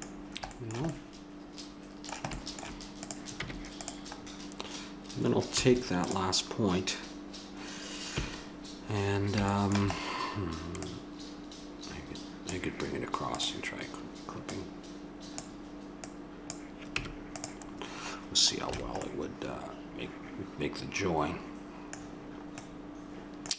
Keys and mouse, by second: 0.9-1.8 middle drag, 3.0-4.7 right drag, 3.4 Tab, 5.5 a, 6.0-7.2 right drag, 7.2 click, 8.1 KP_7, 10.8-12.6 drag, 13.3-17.4 drag, 16.9 Tab, 18.7 a, 19.2 middle click, 23.1-23.5 middle drag.